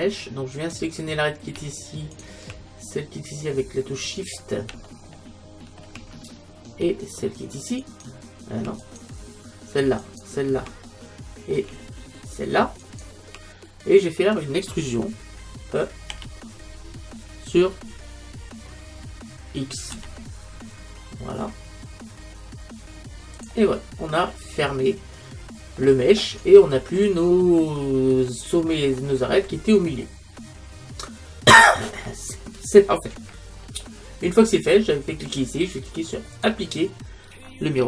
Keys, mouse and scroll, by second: 0.6-4.1 right drag, 4.0-6.7 middle drag, 7.8-12.0 right drag, 10.9-12.7 middle drag, 12.8-14.7 right drag, 14.7-16.1 middle drag, 16.1 e, 23.5-25.3 drag, 25.3 middle click, 26.1-26.8 scroll up 1, 26.8-27.7 scroll up 1, 27.7 scroll up 1, 27.8-31.8 middle drag, 36.4-37.8 drag.